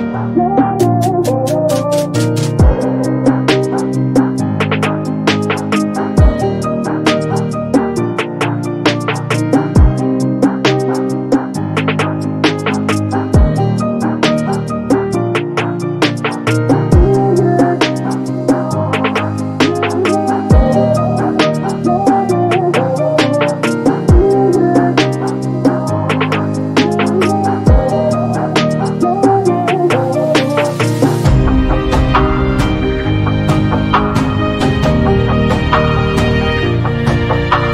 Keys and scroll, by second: 6.9 space, 14.6 space, 19.4 s, 31.7 m.